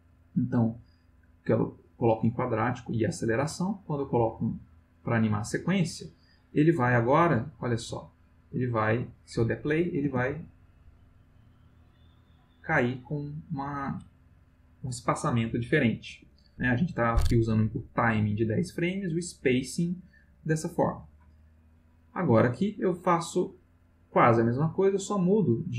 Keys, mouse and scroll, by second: 0.0 click, 4.2 click, 7.2-9.3 drag, 10.0 space, 16.1 Escape, 21.7-22.4 drag, 23.4 click.